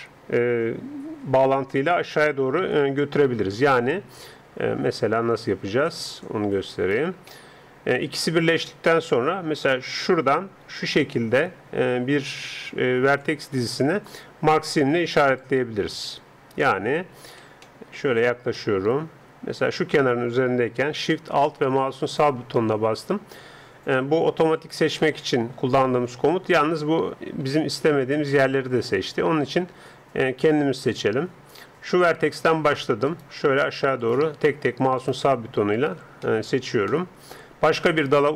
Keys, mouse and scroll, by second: 2.7 d, 2.8-4.9 right drag, 6.9 d, 7.1 d, 9.2-10.0 d, 10.0-11.9 drag, 13.7 d, 15.3 d, 15.4-17.3 right drag, 17.5 d, 18.9 click, 22.1-23.7 right drag, 25.0-30.9 middle drag, 30.9-36.3 right drag, 36.3 middle click, 36.4 right click, 36.7 right click, 37.0 middle click, 37.6-38.3 middle drag.